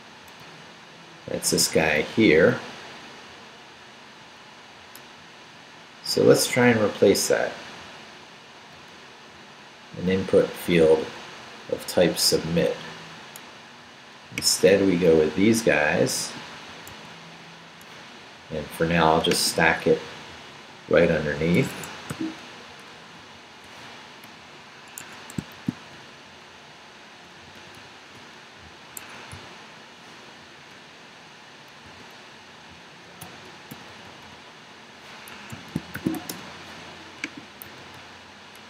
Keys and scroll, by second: 0.4 Down, 2.2 Down, 3.4 Up, 4.2 Down, 16.9 super+c, 20.3 Up, 20.7 Down, 21.7 Escape, 22.1 o, 22.7 super+o, 23.2 super+v, 24.2 super+Up, 25.0 Escape, 25.6 shift+v, 25.7 shift+Down, 26.5 Up, 27.2 shift+Up, 27.4 shift+., 29.0 shift+Escape, 29.3 u, 31.8 shift+v, 32.3 shift+Down, 33.2 shift+., 35.3 Escape, 35.7-36.6 typing, 37.6 super+r.